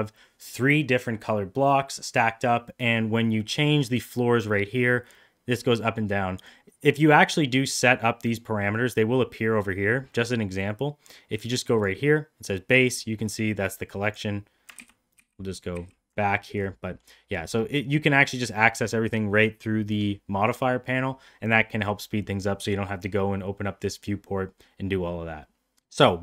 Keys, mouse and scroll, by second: 3.7-6.5 drag, 10.3-11.8 drag, 14.8 ctrl+z, 15.2 ctrl+z, 16.9 middle click, 25.9 middle click.